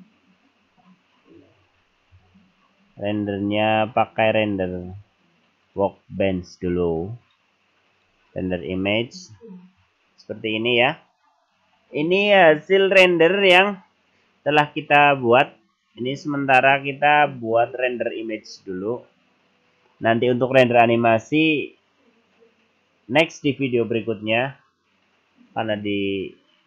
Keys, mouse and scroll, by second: 1.4-2.4 scroll up 24, 2.9-3.9 scroll up 5, 3.9 click, 3.9-4.3 scroll up 1, 4.8 click, 7.2 click.